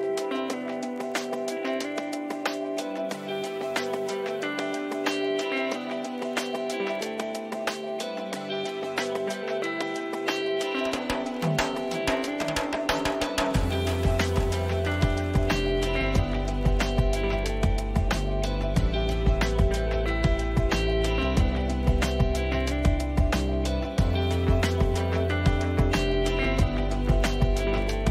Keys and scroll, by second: 1.2 Up, 1.9 Down, 19.6 Return.